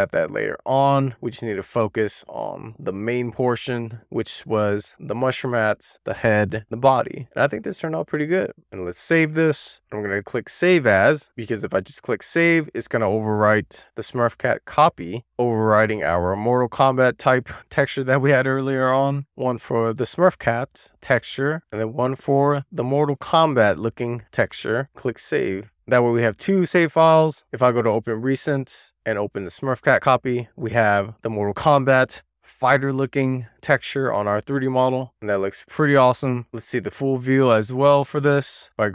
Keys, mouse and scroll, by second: 6.2 scroll down 2, 6.5-6.9 shift+scroll up 2, 6.6 shift+middle click, 6.9-8.1 middle drag, 8.2 shift+middle click, 8.6 scroll up 1, 8.8-10.7 drag, 28.6-33.4 drag, 35.4 click, 37.2-38.9 drag.